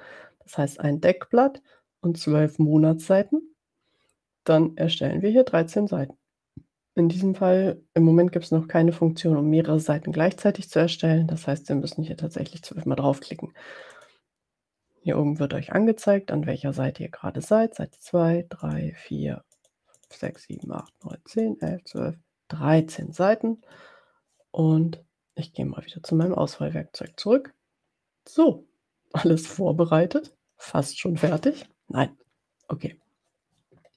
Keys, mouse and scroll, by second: 14.0 click, 18.0 click, 18.9 click, 19.8 click, 19.9 click, 26.2 click, 27.2-30.6 middle drag, 30.6-31.6 drag.